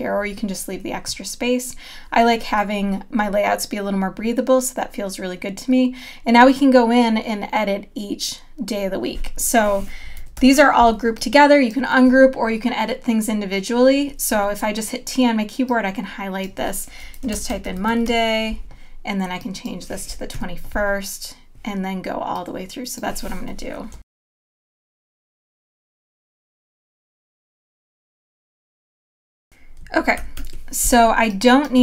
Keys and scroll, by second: 10.4 super+=, 10.9 space, 14.3 t, 17.2-18.5 typing, 20.3 KP_1, 24.0-29.1 typing, 30.1 super+-, 31.0 space.